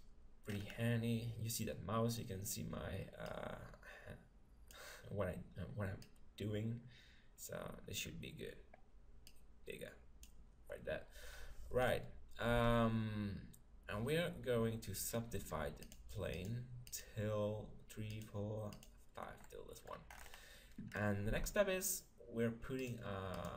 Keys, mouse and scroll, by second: 4.2 click, 6.1-7.8 drag, 9.3-11.0 drag, 11.1 click, 11.8-13.8 middle drag, 12.5 Tab, 15.8-20.5 drag, 19.5 middle click, 20.3-22.8 middle drag, 21.3 Tab, 22.8-23.5 drag.